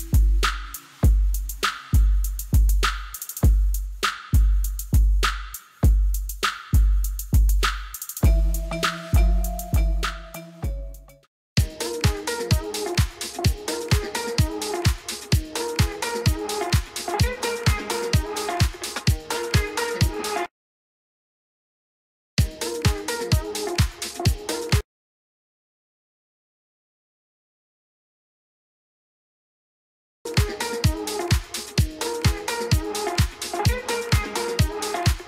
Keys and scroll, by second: 0.4 shift+a, 9.6 space, 28.0 4, 28.3 0, 28.8 Return.